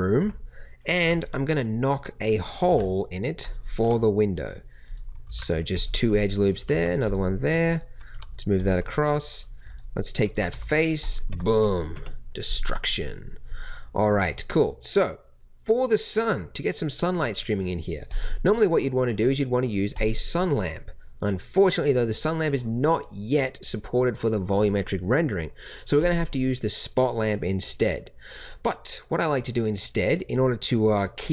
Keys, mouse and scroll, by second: 0.1 Tab, 0.9 Tab, 2.6 ctrl+r, 3.8 g, 5.2 ctrl+r, 6.6 g, 8.1 g, 10.5 x, 11.3 Tab, 11.9 KP_0.